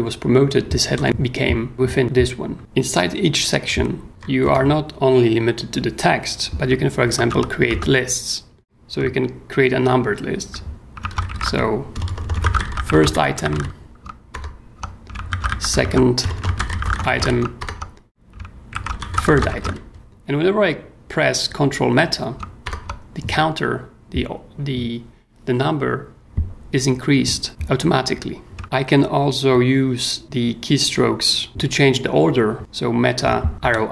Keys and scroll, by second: 0.9 j, 1.7 k, 4.1 o, 4.4 Return, 7.3 l, 7.6 ., 7.7 space, 10.9-14.0 typing, 14.0 ctrl+m, 14.3 ctrl+Return, 15.1 ctrl+shift+Return, 15.2-20.6 typing, 18.4 ctrl+shift+Return, 22.6 ctrl+Return.